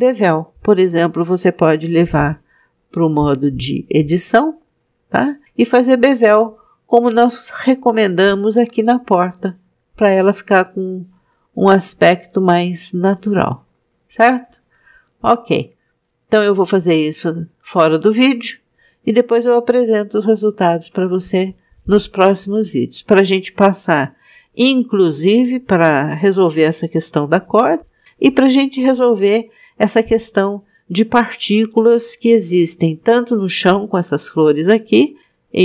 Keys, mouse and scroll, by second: 1.4 click, 4.5 Tab, 5.8 click, 8.0 click, 11.7 click, 13.8 alt+shift+click, 16.6 alt+shift+click, 23.0-23.4 scroll down 3, 24.0-24.9 scroll down 1, 24.9 scroll down 1.